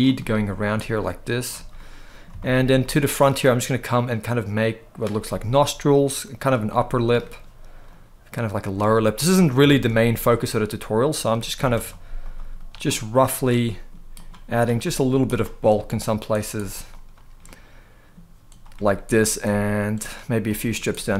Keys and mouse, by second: 0.6 click, 1.5 middle click, 2.1 shift+middle click, 2.5 middle click, 3.2 click, 5.0 middle click, 5.7 click, 6.5 middle click, 7.6 click, 8.5 middle click, 9.4 shift+middle click, 11.3 f, 11.9 click, 12.3 click, 12.6 middle click, 13.4 middle click, 13.9 click, 14.2 click, 14.5 middle click, 15.0 click, 15.3 middle click, 16.1 click, 16.3 click, 16.4 click, 16.6 click, 17.1 middle click, 18.8 click, 19.2 click, 19.7 click, 20.2 middle click.